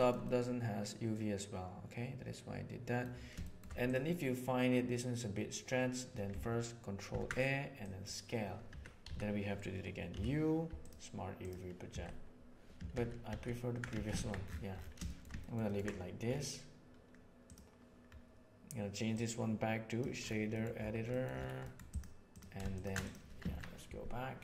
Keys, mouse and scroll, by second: 0.2-3.0 middle drag, 3.4 shift+middle drag, 7.0 ctrl+a, 8.6 Tab, 9.0 a, 10.0 u, 11.8 Tab, 12.9 ctrl+z, 13.2 ctrl+z, 13.8 Tab, 14.1 alt+a, 15.0 shift+middle click, 15.4 ctrl+middle click, 17.4 right click, 19.2-19.9 drag, 21.0 middle click, 21.5 middle click, 22.2 click, 22.7 ctrl+shift+drag, 23.0 click, 23.4 alt+a.